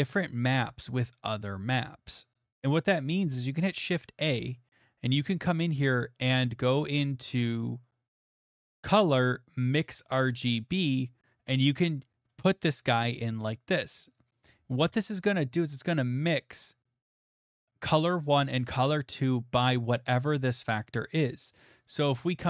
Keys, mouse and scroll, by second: 3.5 a, 8.1 click, 10.1 click, 12.4 click, 14.4-15.1 scroll, 21.5 scroll, 21.8 click, 22.2 middle click.